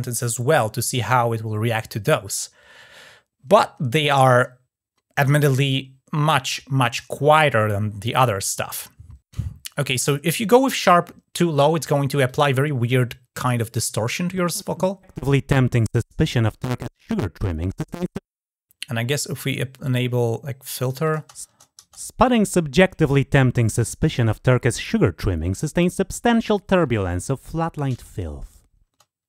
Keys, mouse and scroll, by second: 12.0 click, 15.0-17.6 drag, 19.9-20.7 drag, 20.8 click, 23.4-25.6 drag, 27.7 click.